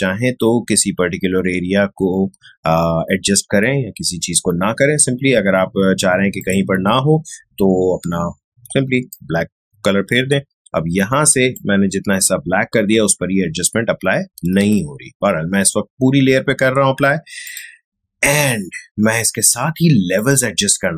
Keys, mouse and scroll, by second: 6.4 click, 7.8-8.5 typing, 9.1-14.6 drag, 14.6 ctrl+z, 17.4 click, 20.1 click.